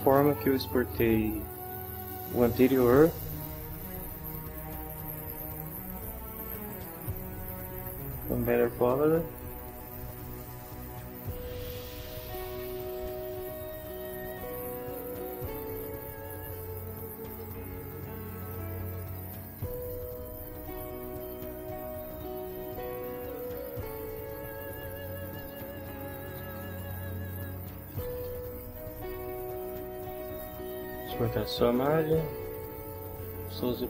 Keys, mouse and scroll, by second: 5.2 click, 6.7 click, 8.6 click, 17.3 click, 25.4 click, 26.1-28.7 typing, 30.3 click, 33.7 click.